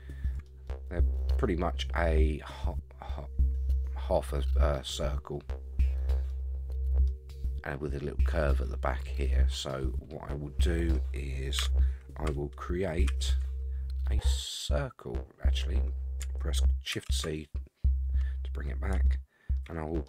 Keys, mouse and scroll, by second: 0.6-1.8 middle drag, 6.3 middle click, 9.3-10.9 middle drag, 11.6 Tab, 13.1 shift+a, 16.9 shift+c, 18.0-18.9 scroll up 8, 19.0-19.5 shift+middle drag, 19.7 middle click.